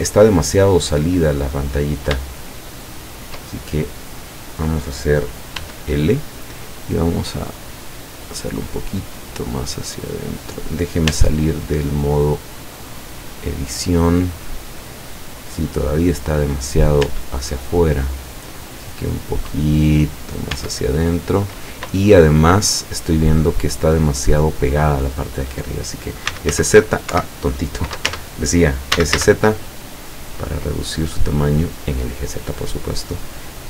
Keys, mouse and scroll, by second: 0.0 scroll down 2, 0.5-1.7 middle drag, 1.8 scroll up 2, 2.5 shift+click, 4.4 scroll up 2, 5.7 l, 7.1-10.6 drag, 11.1 Tab, 12.5-17.0 middle drag, 17.1 Tab, 18.6-20.4 drag, 20.6 Tab, 21.7-23.0 middle drag, 23.1 scroll down 1, 26.3 s, 26.6 z, 28.2 Tab, 29.0 s, 29.2 z, 31.9 click, 33.1-33.6 drag.